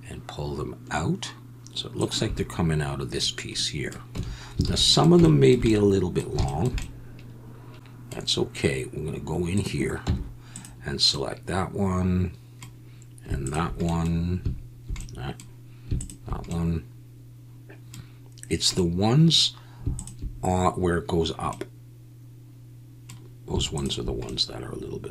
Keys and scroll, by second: 4.1 Tab, 4.6 alt+a, 10.0 Tab.